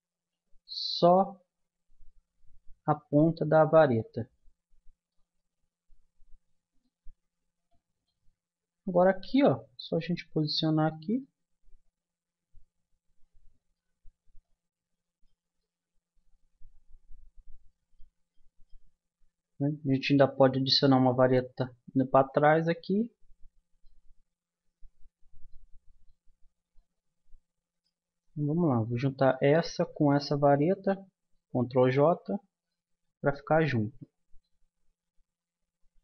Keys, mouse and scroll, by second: 1.0-2.9 drag, 3.1-9.1 middle drag, 9.1 g, 11.2-13.1 middle drag, 14.0-17.4 middle drag, 18.3-21.7 middle drag, 22.3-26.0 middle drag, 26.3 Tab, 29.1-31.0 drag, 30.8 ctrl+j, 32.7-34.3 middle drag, 34.8 a.